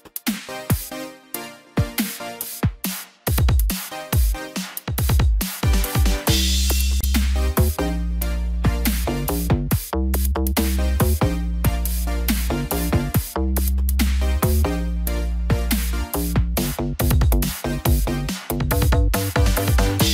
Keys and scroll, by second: 6.9 ctrl+t.